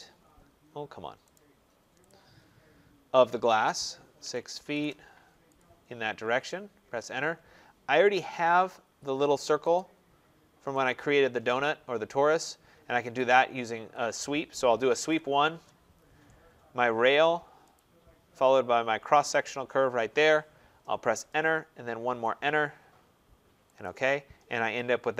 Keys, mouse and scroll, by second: 0.0 middle click, 0.1 middle click, 0.2 middle click, 0.5 middle click, 0.6 middle click, 1.1 scroll, 1.2 right click, 2.0 click, 2.2-3.1 scroll, 4.1-4.5 typing, 4.6 Return, 5.5 click, 5.8 scroll, 6.7 Return, 7.5-8.4 scroll, 8.4 middle click, 8.5 middle click, 9.7 click, 9.8-10.7 scroll, 10.7 click, 13.7 Escape, 14.3-15.4 typing, 15.4 Return, 17.6 click, 19.3 click, 20.8 Return, 21.8 Return, 23.7 click, 24.3-24.9 scroll.